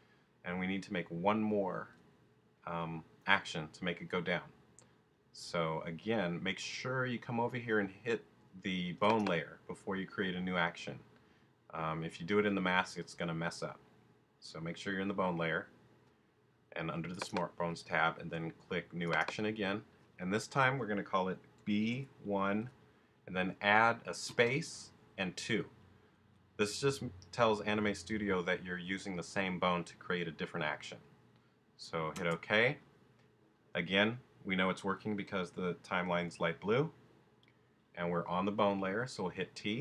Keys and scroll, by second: 21.6 shift+b, 22.2 shift+i, 23.0 i, 24.3 space, 25.4 2, 32.1 Return, 39.6 t.